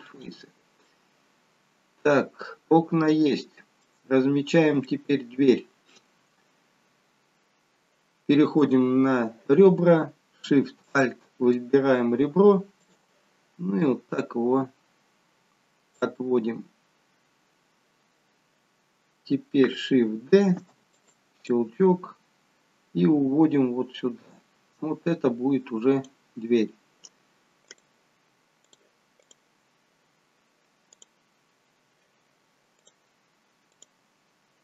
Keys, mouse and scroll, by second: 1.0 middle click, 4.2 scroll up 2, 5.0 shift+middle click, 8.6 click, 10.9 alt+shift+click, 13.0 click, 13.9 click, 20.5 shift+d, 21.6 click, 27.8 click, 28.8 click, 31.0 click, 32.9 click.